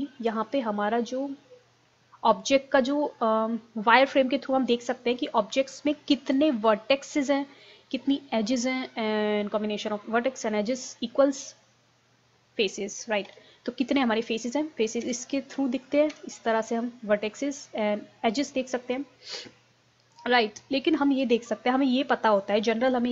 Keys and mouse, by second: 0.5-2.0 middle drag, 4.3-6.1 middle drag, 8.5-10.3 middle drag, 13.3 KP_1, 14.0 middle click, 15.0 z, 16.2 z, 18.8 middle click, 19.7-20.8 middle drag.